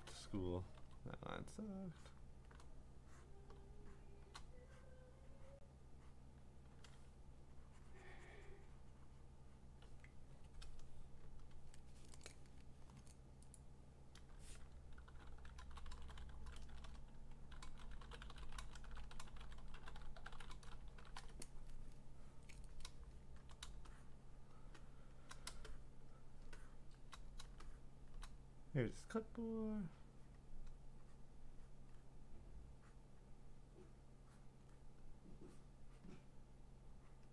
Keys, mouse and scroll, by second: 0.0 click, 0.1 click, 0.9 ctrl+z, 2.2 click, 3.3 click, 4.2 click, 5.1 click, 5.6 click, 6.2 click, 7.6-9.6 `, 9.6 click, 9.6 `, 9.8 `, 12.3 click, 13.5 click, 14.8-19.1 typing, 15.4-16.6 drag, 22.6 Return, 22.6 typing, 23.4 click, 23.5 click, 23.6 click, 24.2 click, 24.5 click, 24.6 click, 24.6-25.3 click, 24.7 click, 24.8 click, 25.2 click, 25.5 click, 26.1-26.9 click, 27.0 click, 27.4 click, 28.0 click, 28.1 click, 29.2 click, 30.3 click, 31.3 click, 31.9 click, 33.2 click, 33.8 click, 34.6 click, 36.0 click, 37.2 click.